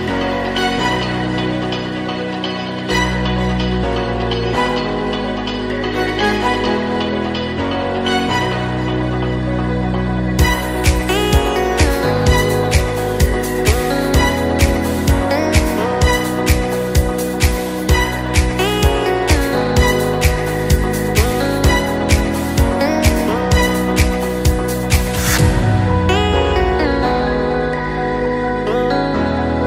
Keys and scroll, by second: 7.0 super+Delete.